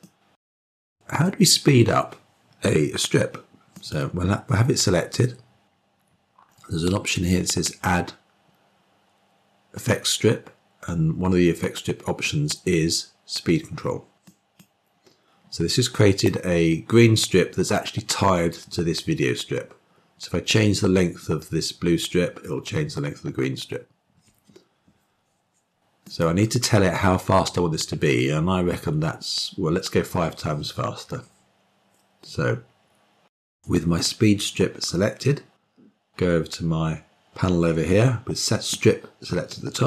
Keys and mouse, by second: 3.7 click, 7.5-14.6 drag, 25.9 click.